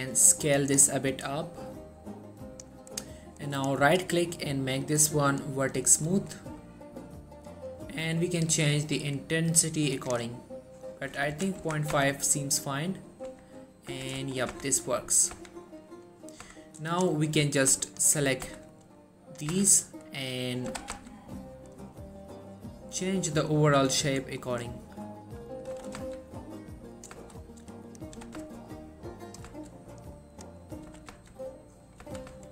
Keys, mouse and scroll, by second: 0.9 right click, 1.2 s, 2.6 click, 3.7 right click, 5.6-10.4 drag, 10.1 right click, 11.5 1, 11.7 Tab, 12.0 z, 13.4 Tab, 13.8 scroll down 1, 14.0 Tab, 14.3 shift+middle click, 14.6 z, 15.5 z, 16.5 Tab, 17.0 click, 18.0 shift+click, 18.5 z, 18.8-19.7 click, 19.6 z, 20.8 g, 21.0 z, 21.1-24.2 scroll down 1, 25.6 right click, 25.8 g, 26.1 z, 27.1 click, 27.4-28.0 shift+scroll up 2, 28.0 click, 28.3 g, 28.5 x, 29.4 click, 29.7 shift+middle click, 30.5 click, 31.0 g, 31.2 z, 32.0 click, 32.1 z, 32.4 Tab.